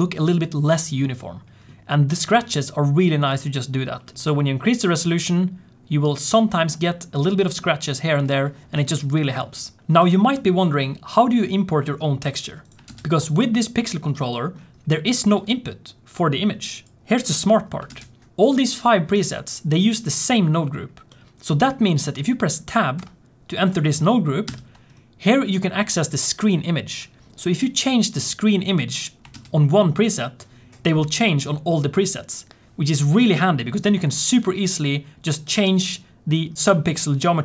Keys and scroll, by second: 17.9 ctrl+space, 18.2 shift+F1, 29.4 ctrl+space.